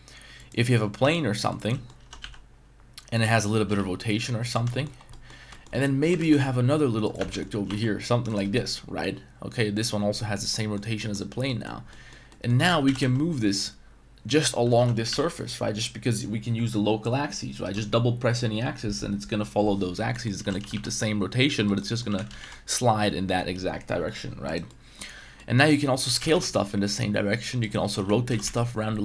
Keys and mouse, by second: 1.0 g, 1.7 middle click, 2.0 r, 2.2 y, 3.2 middle drag, 3.6 r, 3.7 z, 4.7 shift+middle drag, 5.1 middle drag, 5.5 shift+middle drag, 6.2 shift+d, 6.4 s, 7.2 Tab, 7.3 middle click, 7.5 a, 7.7 e, 8.3 click, 8.5 Tab, 8.5-9.6 middle drag, 10.6 middle drag, 11.0 middle drag, 11.5 middle click, 11.9 middle drag, 12.3 middle drag, 12.6 g, 12.8 x, 13.0 x, 14.3 click, 14.5 middle drag, 14.8 g, 14.9 y, 15.1 y, 17.6 right click, 20.1 middle click, 20.4 g, 20.6 y, 20.7 y, 21.6 right click, 21.8 middle drag, 22.1 g, 22.3 x, 22.4 x, 24.4 right click, 24.7 middle drag, 25.4 middle drag, 26.0 s, 26.2 x, 26.3 x, 27.9 r, 28.3 z, 28.4 z.